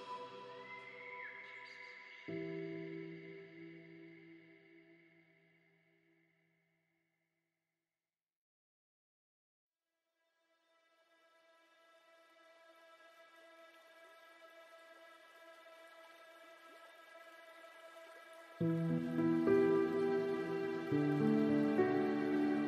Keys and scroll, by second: 14.1 ctrl+a, 18.2 ctrl+d, 21.6 ctrl+alt+s.